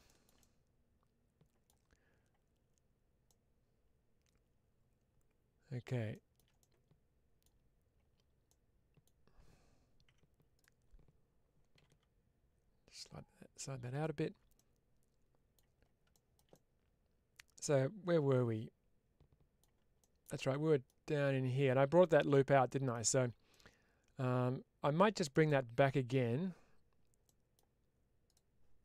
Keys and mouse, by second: 3.1-5.7 middle drag, 6.5 middle click, 8.3 middle click, 10.0 2, 13.8 click, 14.4-15.4 middle drag, 16.0 shift+middle click, 16.8-19.4 middle drag, 22.2 middle click, 23.4-25.2 middle drag, 27.1 middle click, 28.1 click.